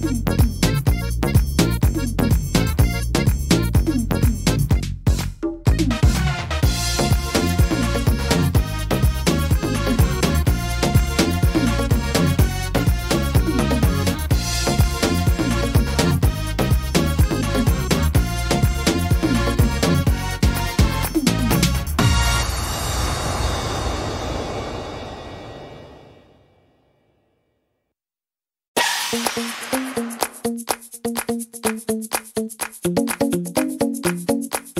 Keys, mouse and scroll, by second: 0.6 s, 2.4 middle click, 2.7 scroll down 1, 3.2 scroll down 1, 3.6 middle click, 4.1 shift+middle click, 4.5 scroll up 4, 5.1 middle click, 5.9-6.7 scroll down 10, 6.7 middle click, 7.2 middle click, 7.2-7.7 scroll up 3, 8.0 middle click, 8.3-8.9 scroll down 2, 8.7 middle click, 9.8-10.5 scroll down 4, 10.5 middle click, 11.0-12.1 scroll up 5, 12.1 a, 13.2 click, 14.1-14.7 scroll down 3, 14.5 middle click, 16.2 shift+middle click, 16.6-17.6 scroll up 5, 17.0 shift+middle click, 17.9 middle click, 18.2-18.7 scroll down 2, 18.7 middle click, 19.0 scroll down 2, 21.0 click, 23.2 click, 27.9 click, 27.9 middle click, 29.0 middle click, 30.2 click, 32.4 click, 33.8 click.